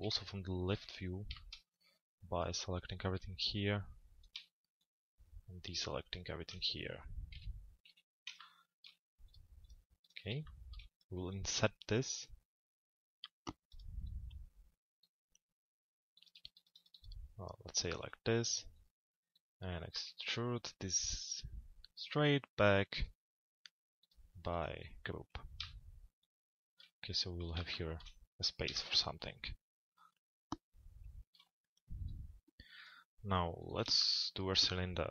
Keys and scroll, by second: 0.7 z, 6.9 p, 7.9 z, 34.8 t.